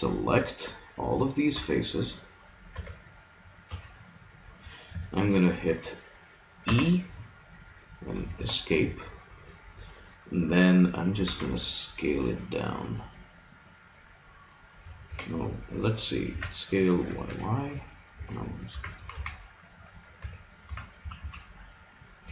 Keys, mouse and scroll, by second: 1.5 b, 2.7 b, 3.7 b, 6.7 e, 11.2 s, 16.3 s, 18.7 s, 20.7 s.